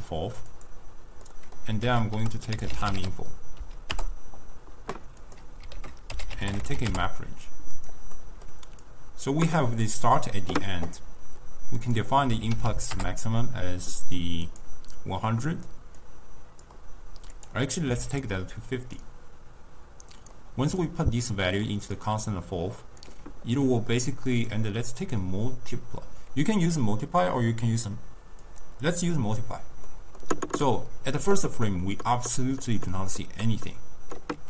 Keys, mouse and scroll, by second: 1.3 middle click, 1.9 ctrl+a, 5.8 ctrl+a, 8.2 middle click, 8.9 click, 11.9 click, 12.7 0, 14.2 click, 16.1-18.3 drag, 19.1 drag, 21.3-22.1 drag, 23.7-24.4 middle drag, 24.4-27.5 drag, 29.9-33.5 middle drag.